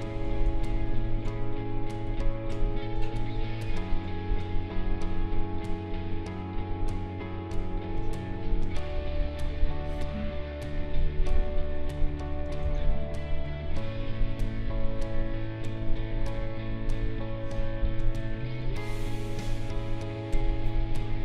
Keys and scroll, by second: 0.4 ctrl+z, 12.6 ctrl+z.